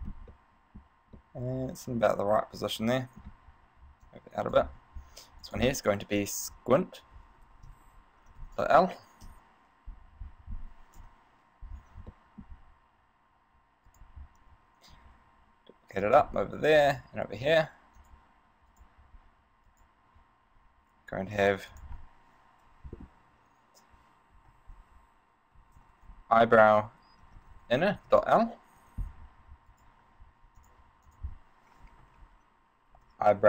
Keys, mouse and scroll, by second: 0.2 scroll up 3, 0.6 middle click, 1.4 middle click, 4.1 click, 5.6 click, 9.4 KP_1, 11.2 KP_1, 12.4 shift+middle click, 14.1 right click, 15.2 shift+d, 16.3 click, 17.0 shift+d, 18.3 click, 18.9 right click, 19.9 right click, 21.6 click, 22.0 click, 30.0 right click, 30.8 click, 31.2 click.